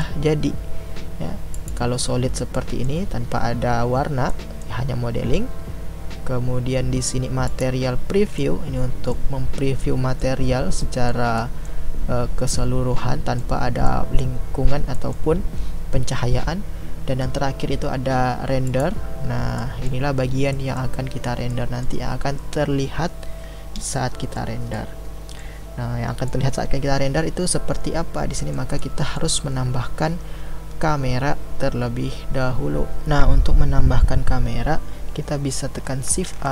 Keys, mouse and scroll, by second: 1.5-2.5 drag, 2.5-7.5 middle drag, 7.5 click, 8.7-18.6 middle drag, 18.6 click, 19.6-25.8 middle drag, 25.8-26.3 scroll down 1, 26.3-33.0 middle drag.